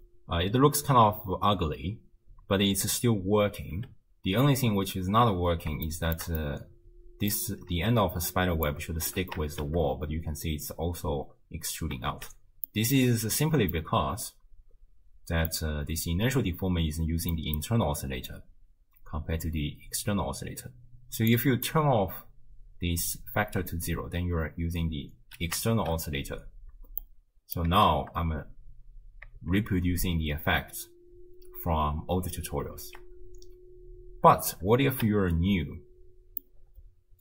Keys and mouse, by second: 3.8 space, 5.7 shift+space, 6.0 shift+click, 6.4-7.1 drag, 7.1 middle click, 8.4 d, 8.7 click, 9.1 d, 9.5 shift+space, 11.2 space, 12.1 shift+space, 12.7 click, 13.8 click, 13.9 middle click, 14.2-15.5 drag, 14.2-15.5 right drag, 17.3 click, 17.3 right click, 21.3 click, 24.2 space, 25.7 shift+space, 26.7 space, 27.1 click, 27.8 shift+space, 29.4 shift+space, 30.2 space, 31.2 space, 32.8 shift+space, 34.8 space, 36.5-37.2 drag.